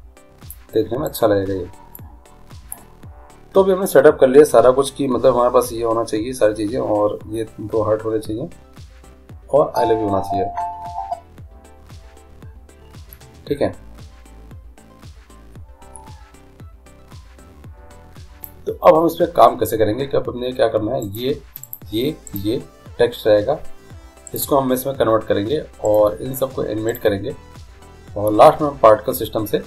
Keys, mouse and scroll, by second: 1.4-3.0 right drag, 2.2-4.0 drag, 21.3-29.0 right drag.